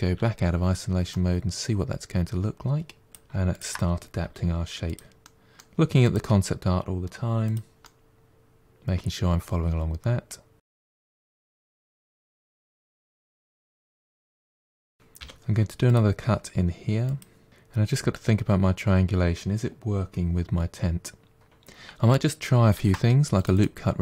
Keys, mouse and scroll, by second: 0.0 KP_Divide, 0.7 scroll down 1, 0.9-3.1 middle drag, 3.3 shift+click, 4.1 g, 5.1 middle click, 5.9 click, 7.7-10.6 middle drag, 11.6 middle click, 11.9 g, 12.1 g, 12.5 right click, 12.8 ctrl+z, 13.0 ctrl+z, 13.1 click, 13.4 g, 14.5 middle click, 15.1 k, 22.6 ctrl+r.